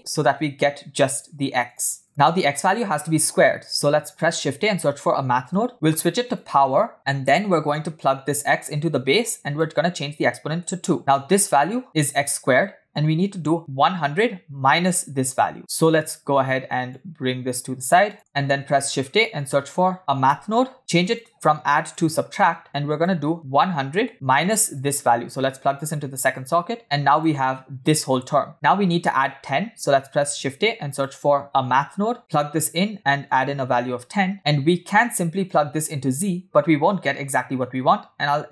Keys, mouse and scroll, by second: 2.1 click, 3.6 shift+a, 6.6 click, 8.4-9.1 drag, 9.5 click, 11.0 click, 15.2-15.6 scroll down 1, 15.6 middle drag, 15.6 scroll down 1, 15.9-16.5 drag, 16.9 drag, 18.1 click, 18.1 middle click, 18.5 shift+a, 20.8 click, 21.0-21.9 drag, 22.9-24.0 drag, 23.7 0, 24.8-25.9 drag, 26.4 click, 30.1 shift+a, 32.2-32.9 drag, 33.3-34.3 drag, 35.5-38.5 drag.